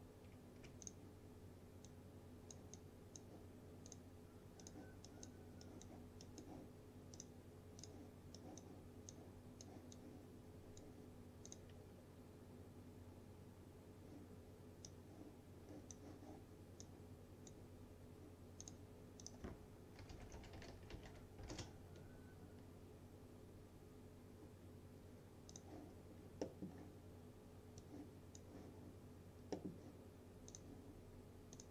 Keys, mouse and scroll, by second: 0.9-3.4 drag, 14.9-16.2 drag, 16.9-17.8 drag, 19.8-22.0 typing, 25.6 click, 26.5 middle click, 26.8-27.8 scroll down 1, 27.8-28.5 drag, 29.6 middle click, 30.6-31.7 drag.